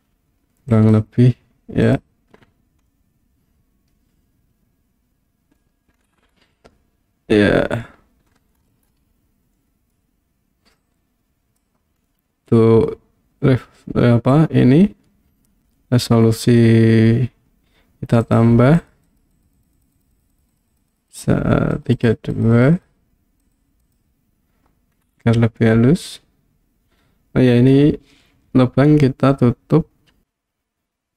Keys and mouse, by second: 0.8 click, 1.9 click, 2.9-5.6 middle drag, 6.8-7.9 middle drag, 9.6-10.0 middle drag, 10.8 click, 12.1-12.5 middle drag, 18.2 click, 18.8 click, 19.1 click, 19.3 click, 19.6 click, 19.8 click, 20.0 click, 20.2 click, 20.3 click, 20.6 click, 20.7 click, 21.0 click, 21.1 click, 21.7 click, 22.0 click, 22.5 click, 22.6 click, 22.8 click, 24.0 click, 25.6-27.8 middle drag.